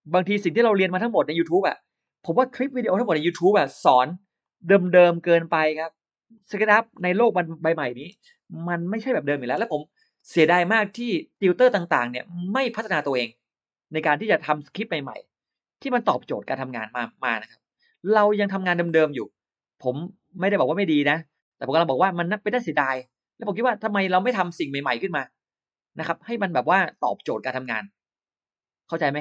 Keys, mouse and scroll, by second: 0.1 click, 1.9 click, 3.3 scroll down 1, 4.3 click, 4.7-5.0 scroll up 1, 6.2 click, 6.5 scroll down 1, 8.0 space, 8.8-9.1 scroll down 1, 9.1 middle click, 9.3 scroll up 1, 11.2 click, 12.1 click, 14.4 click, 15.9 click, 17.0 click, 19.4 click, 20.5 click, 22.3 click, 23.7 click, 26.3 click.